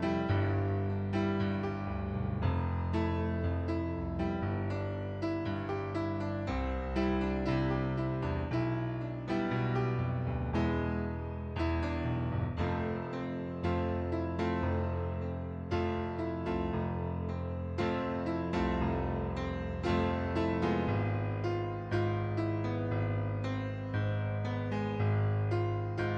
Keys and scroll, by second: 2.6 ctrl+z, 10.9 ctrl+d.